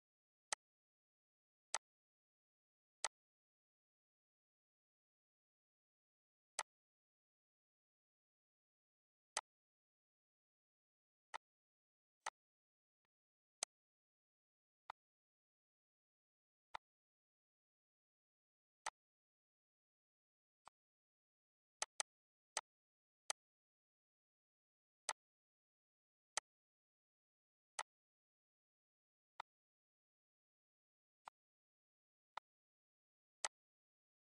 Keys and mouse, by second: 1.3 click, 3.4 click, 5.2 click, 6.1 click, 6.7 click, 7.4 click, 9.1 click, 10.1 click, 11.1 click, 12.1 click, 13.4 click, 14.2 click, 15.1 click, 16.1 click, 17.8 click, 19.1 click, 20.1 click, 22.0 click, 29.6 click, 31.8 click, 32.9 click, 34.0 click.